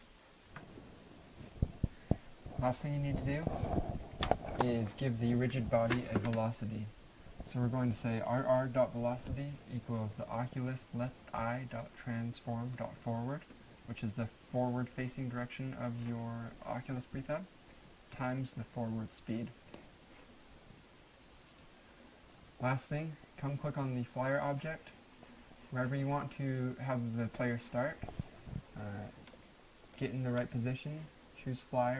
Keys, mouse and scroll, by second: 0.4 alt+F9, 21.5 alt+F9, 21.7 click, 23.9 click, 29.3 middle click, 31.5 click.